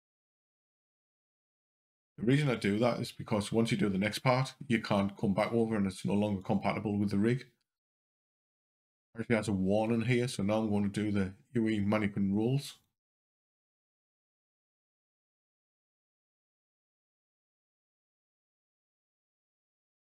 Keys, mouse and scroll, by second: 1.8 click, 6.2 click, 8.3 scroll down 2, 12.5 click, 14.1 scroll up 2, 16.6 click, 19.0 shift+click.